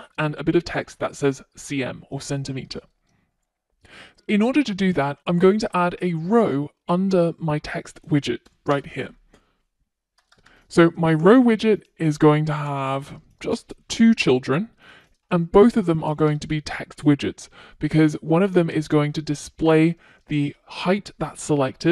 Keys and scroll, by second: 11.2 Return, 16.1 Return.